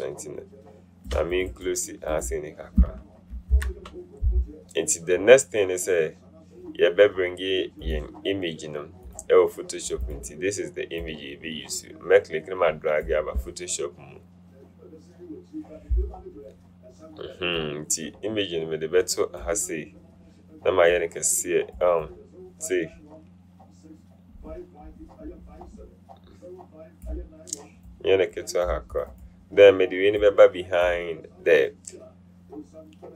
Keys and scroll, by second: 3.6 ctrl+0.